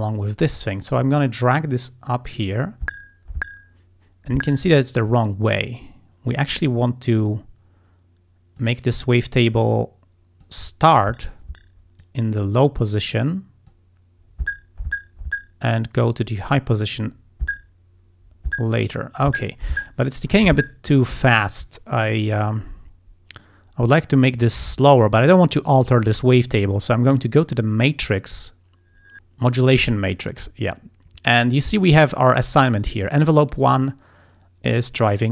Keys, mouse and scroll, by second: 1.2-2.6 drag, 6.7-8.8 drag, 9.7 click, 12.0-13.9 drag, 28.1 click.